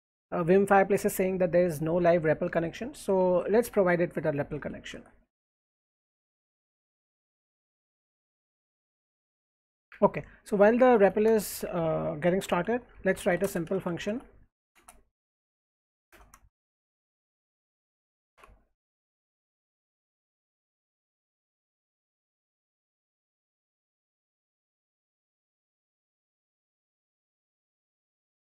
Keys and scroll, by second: 3.2 alt+Left, 4.5 Up, 6.2 Up, 6.2-28.4 typing, 8.6 alt+Right.